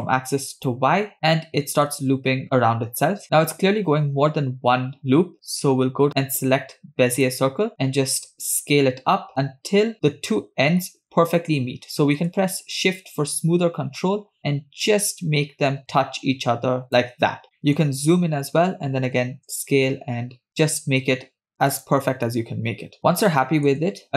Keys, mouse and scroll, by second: 0.5 click, 1.4-3.2 middle drag, 7.5 click, 8.5 s, 17.4-18.3 scroll up 8, 17.6-17.9 shift+middle drag, 19.5 s, 23.0 scroll down 4, 23.3-24.0 shift+middle drag.